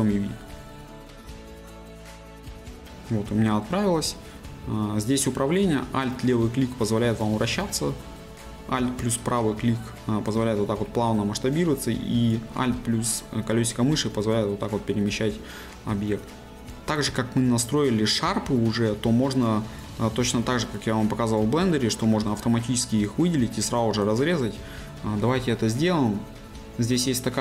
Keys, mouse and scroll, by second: 0.0-27.4 drag.